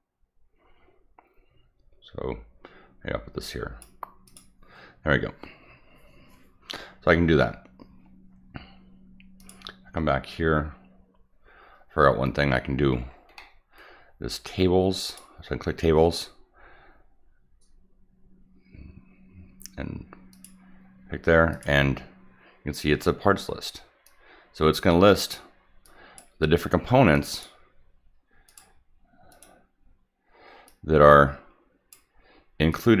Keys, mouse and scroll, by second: 4.2 click, 9.3 click, 12.5 scroll up 1, 13.3 middle click, 15.0 click, 20.3 click, 21.5 click, 24.0-24.7 drag, 25.2 click, 25.8-26.1 drag, 27.1 click, 27.3 click, 28.4 click, 29.3 click, 30.6-31.9 drag, 32.7-33.0 drag.